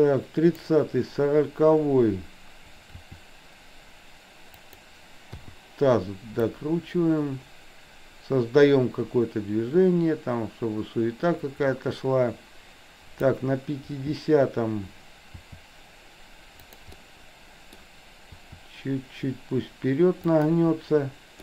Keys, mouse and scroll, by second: 3.1 r, 5.5 i, 6.5-13.4 drag, 15.4 r, 17.0-17.9 middle drag, 18.4 r.